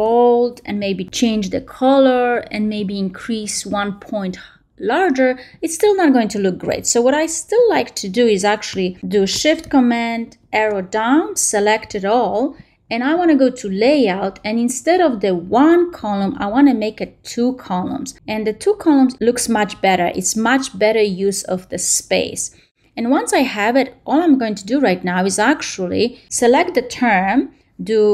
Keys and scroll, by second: 10.1 shift+super+Down.